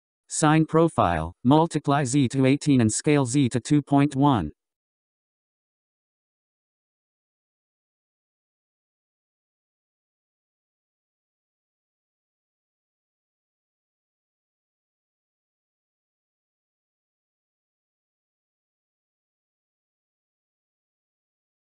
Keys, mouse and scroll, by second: 1.2-1.9 scroll down 6, 2.3-3.1 scroll up 4, 3.1-12.7 drag, 15.2-16.3 scroll down 9, 16.3-17.1 scroll up 11, 17.8-20.6 drag.